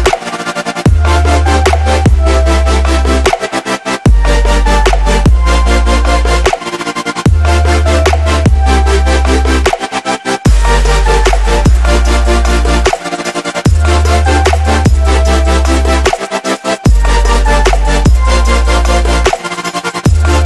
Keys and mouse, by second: 1.1 ctrl+a, 1.5 ctrl+v, 2.0 click, 4.8 ctrl+c, 5.4 click, 9.8 ctrl+a, 10.0 ctrl+v, 10.5 click, 17.3-17.9 space, 20.0 click.